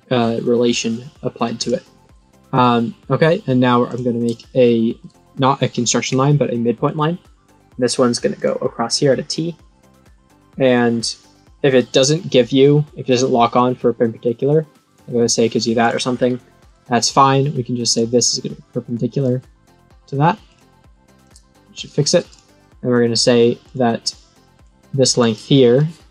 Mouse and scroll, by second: 1.5 click, 3.8 click, 6.8 click, 8.3 click, 14.8 click, 15.8 click, 15.9 click, 16.1 right click, 16.6 click, 17.8 click, 18.8 click, 20.4 click, 21.2 click, 23.6 click, 24.5 click, 25.1 click.